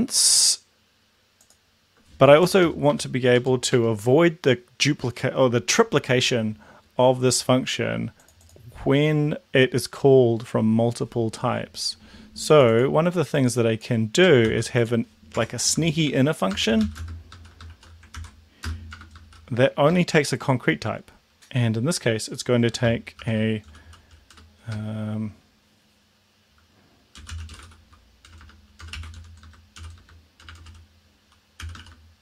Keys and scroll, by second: 2.5 Return, 2.7 Return, 2.8 Up, 3.3 Down, 3.7 Tab, 14.5 ctrl+c, 15.4 Tab, 15.8-19.3 typing, 18.2 ctrl+v, 19.9 Left, 20.0 Delete, 23.2 shift+7, 23.7 s, 24.4 BackSpace, 27.0-30.4 typing, 31.6-32.2 typing.